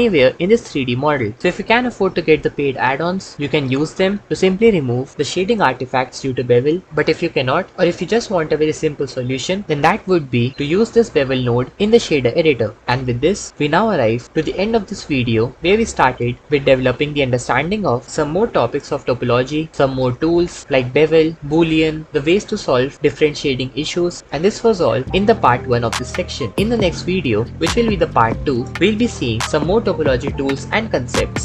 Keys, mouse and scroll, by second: 3.5 BackSpace, 16.4 ctrl+s, 31.1 e, 31.3 Tab.